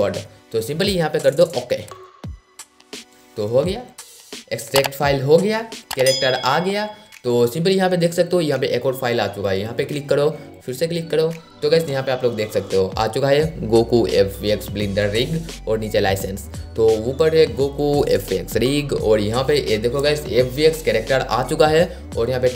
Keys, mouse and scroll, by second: 2.0 click, 19.4 click.